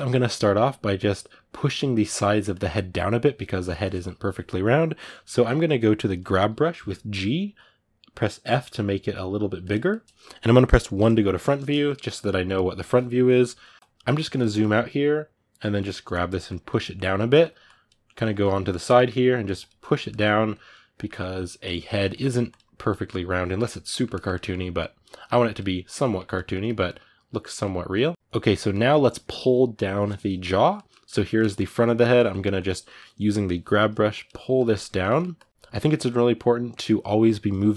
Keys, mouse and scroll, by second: 2.3-6.5 middle drag, 6.5 g, 8.2 f, 9.6-10.7 middle drag, 10.7 KP_1, 13.8-15.3 ctrl+shift+middle drag, 15.3-16.7 drag, 16.7 middle click, 17.4 click, 17.8-19.2 middle drag, 19.2 click, 19.8 middle click, 20.3 click, 20.8 ctrl+middle click, 21.4 click, 21.6 ctrl+shift+middle click, 22.2 click, 22.8-24.5 middle drag, 24.5-25.8 drag, 25.8-32.0 middle drag, 32.0 click, 32.6-33.9 middle drag, 33.9 click, 34.3 ctrl+middle click, 35.1 click, 35.5-37.7 middle drag.